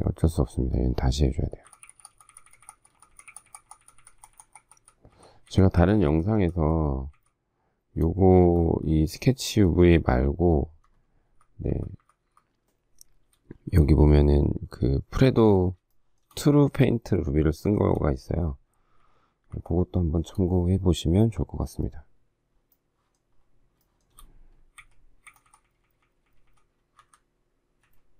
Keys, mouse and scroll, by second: 1.6 shift+Left, 11.3 shift+Right, 15.9 shift+middle click, 17.6 shift+middle click, 19.0 shift+Left, 19.5 shift+Right, 23.8 shift+middle click, 24.8 Left, 25.4 Left, 27.0 shift+Up, 27.8 shift+Down.